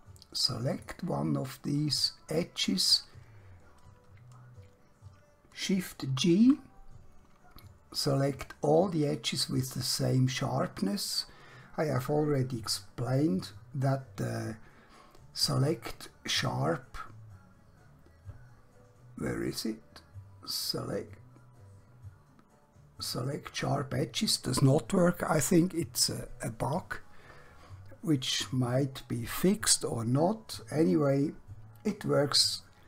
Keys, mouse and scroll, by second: 0.7 click, 1.8 scroll up 1, 2.4-4.5 scroll down 1, 5.6 shift+Num_Lock, 6.2 g, 9.1 click, 15.5 click.